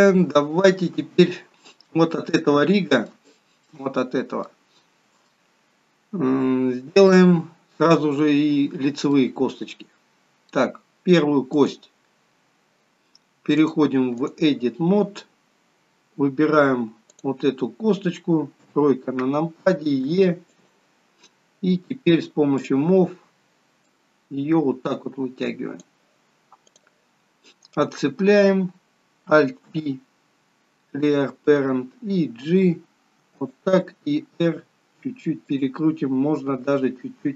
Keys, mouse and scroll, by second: 0.2 shift+middle click, 0.2 scroll up 1, 1.4-2.3 scroll up 1, 2.6 middle click, 3.3 shift+middle click, 4.5 middle click, 4.5 scroll up 1, 7.0 middle click, 11.6 click, 13.6 click, 17.2 click, 18.6 KP_3, 20.1 e, 22.6 click, 23.9 click, 27.7 click, 29.7 alt+p.